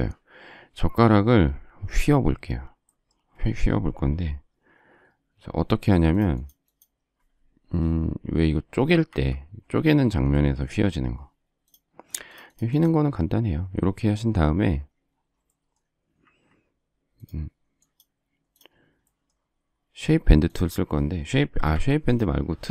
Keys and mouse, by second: 9.1 Escape, 16.2 Escape, 21.7 Delete.